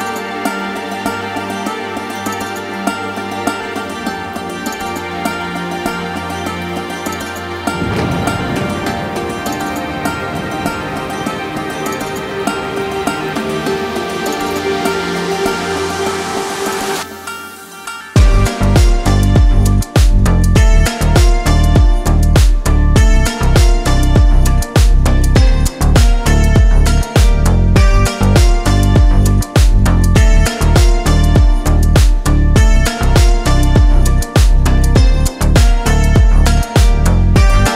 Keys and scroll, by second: 15.1 ctrl+shift+z.